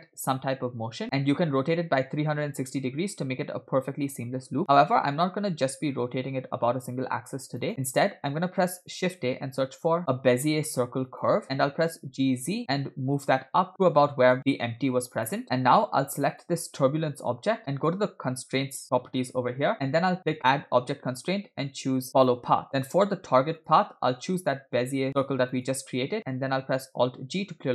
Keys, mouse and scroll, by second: 9.1 shift+a, 11.9 g, 15.4 middle click, 16.3-17.5 drag, 20.4-22.6 drag, 23.7 click, 26.5-27.3 scroll down 2.